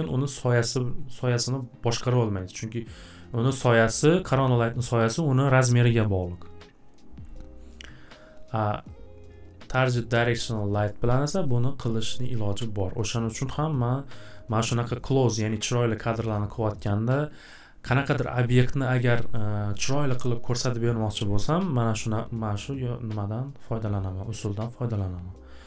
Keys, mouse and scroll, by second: 8.9 click, 11.5 click, 22.0 click, 22.6 click, 24.9 click.